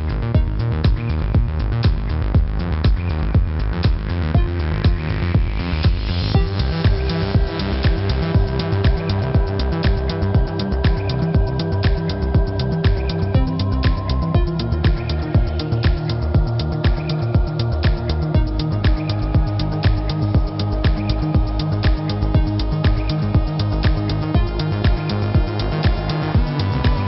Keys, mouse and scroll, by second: 0.9 click, 3.6 space, 3.7 click, 3.8 space, 4.0 click, 4.9-5.5 typing, 5.2 click, 6.3 click, 7.1 b, 8.3 click, 9.7 v, 9.9 click, 15.4 b, 16.5 click, 17.3 z, 17.5 click, 19.7 z, 19.9 click, 22.5 z, 22.6 click, 23.7 click, 26.3 space, 26.5 click.